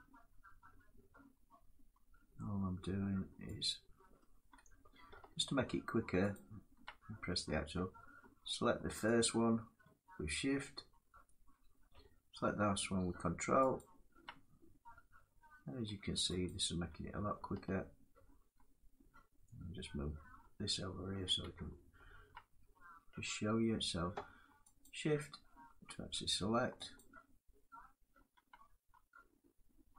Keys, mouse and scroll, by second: 6.0 ctrl+click, 8.9 shift+click, 13.5 ctrl+click, 16.2 shift+click, 20.9 shift+middle click, 24.5 shift+click, 26.7 shift+click.